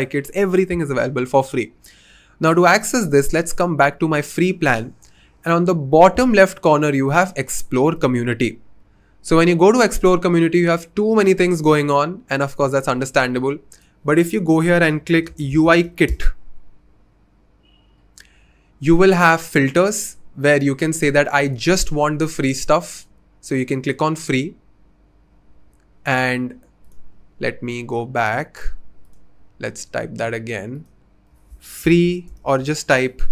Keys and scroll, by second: 14.6-16.3 typing, 21.0 typing, 31.2-33.3 typing.